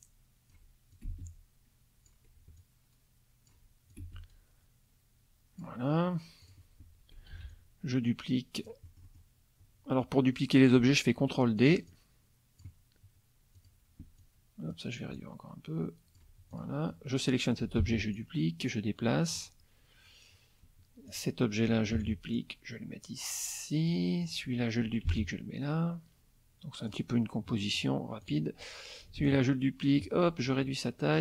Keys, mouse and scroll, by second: 0.9-2.3 ctrl+drag, 1.1 ctrl+space, 2.6 ctrl+click, 3.9-5.8 ctrl+drag, 4.0 ctrl+space, 6.4 click, 7.3 ctrl+d, 7.5-8.8 ctrl+drag, 8.8 middle click, 10.7-11.8 ctrl+drag, 11.9-12.8 ctrl+drag, 13.6 click, 14.2 click, 15.2 ctrl+click, 16.5 ctrl+click, 17.8 ctrl+d, 18.2-19.5 ctrl+drag, 21.1 click, 21.9 ctrl+d, 22.3-24.1 ctrl+drag, 24.2 click, 25.1 ctrl+d, 25.2-27.1 ctrl+drag, 27.5 middle click, 28.2 click, 29.2 ctrl+d, 29.3-30.2 ctrl+drag, 30.4-31.2 ctrl+drag.